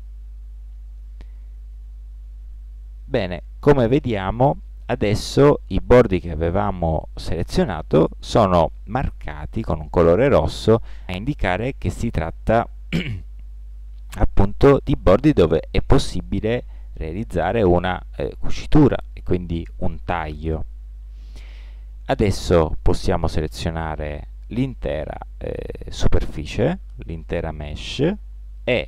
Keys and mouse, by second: 1.1 middle click, 2.3 a, 3.2-5.0 middle drag, 6.5-8.4 middle drag, 13.3 middle click, 15.4-19.2 middle drag, 23.7 a, 25.0-28.8 middle drag.